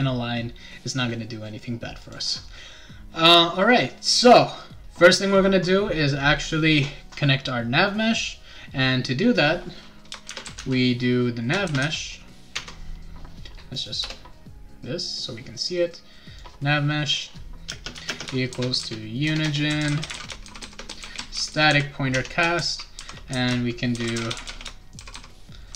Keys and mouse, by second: 2.0 click, 10.0-12.3 typing, 12.5 Tab, 13.7 click, 14.0 Return, 15.5 click, 17.1 click, 17.7-25.7 typing.